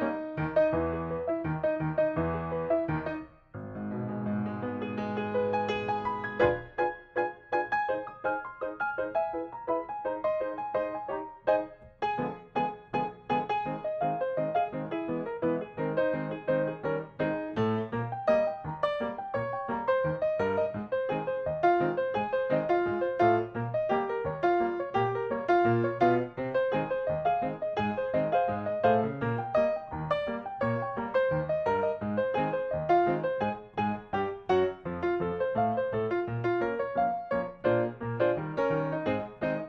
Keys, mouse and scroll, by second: 0.6 click, 1.8 middle click, 3.2 c, 3.9 click, 5.0 middle click, 5.7-7.0 drag, 9.0 right click, 9.6 click, 9.9 middle click, 10.5 click, 11.2 g, 11.4 middle click, 12.4 m, 13.3 click, 15.2 middle click, 16.7 click, 18.4 scroll down 1, 18.8 shift+middle click, 19.5 shift+middle click, 20.3 click, 21.3 KP_4, 23.6-24.0 scroll up 1, 24.3 shift+middle click, 24.6 click, 24.9 g, 25.2-25.5 scroll up 1, 25.5 l, 26.1 click, 27.7 m, 28.2 click, 28.5 scroll down 1, 29.7-30.2 scroll down 1, 30.3 shift+middle click, 30.7 scroll up 1, 31.4 click, 31.7 scroll up 1, 31.9 click, 32.9 p, 33.0 click, 34.0 click, 34.3 middle click, 34.7 click, 35.1 m, 35.4 click, 36.5 Down, 38.0 click, 38.3 middle click, 39.0 scroll down 1, 39.3 shift+middle click.